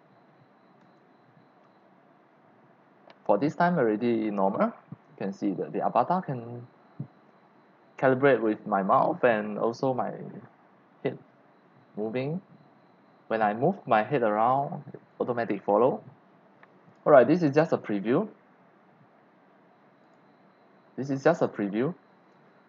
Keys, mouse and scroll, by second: 16.9 click, 20.1 click, 20.2-21.3 drag, 22.0 click, 22.1 click.